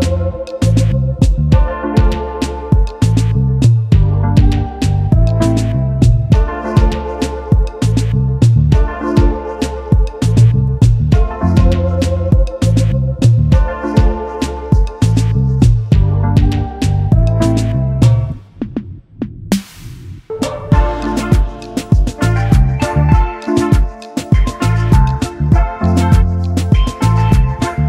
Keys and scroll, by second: 4.3 ctrl+z, 18.4 space, 21.0 space, 21.4 space, 23.2 space, 24.3 ctrl+s.